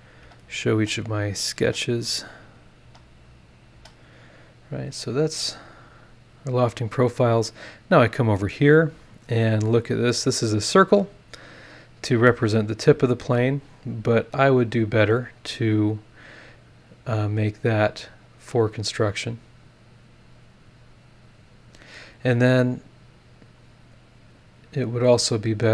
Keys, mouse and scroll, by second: 0.2 space, 0.5 click, 1.4 click, 1.6 space, 2.2 click, 2.8 space, 3.5 click, 3.7 space, 4.3 scroll down 2, 4.9 click, 5.2-6.2 scroll up 6, 6.3 scroll up 2, 7.4 click, 9.1 click, 10.1-10.8 scroll down 4, 11.1 scroll down 2, 11.9-12.8 scroll up 6, 13.7 click, 16.1 click, 17.8 click, 19.0 click, 20.2 click, 21.4 click, 23.4 click, 23.8 middle click, 25.3 click.